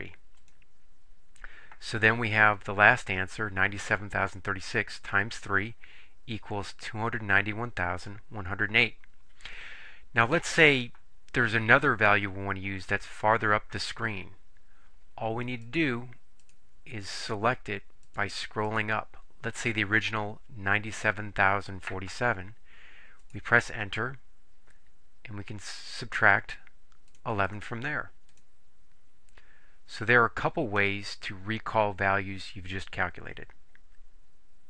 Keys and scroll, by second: 0.4 Return, 15.7 Up, 16.5 Up, 17.5 Up, 18.8 Up, 23.3 Return, 26.1 -, 27.1 1, 27.5 1, 28.4 Return.